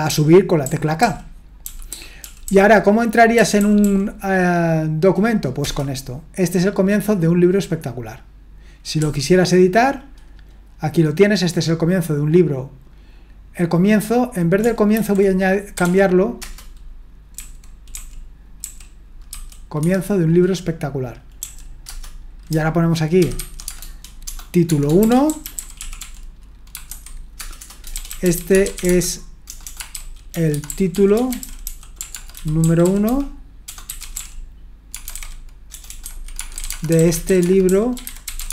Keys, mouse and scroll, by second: 0.0-4.1 typing, 5.6 Return, 9.0 typing, 15.5-19.3 typing, 19.8 Escape, 21.4-21.9 typing, 23.1-38.5 typing.